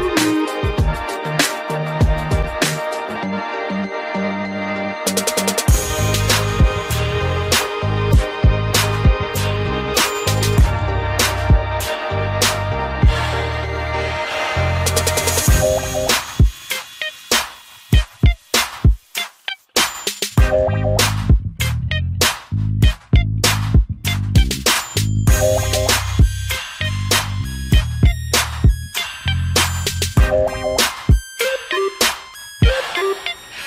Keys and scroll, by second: 0.3 ctrl+t, 5.1 Return, 25.8 ctrl+alt+z.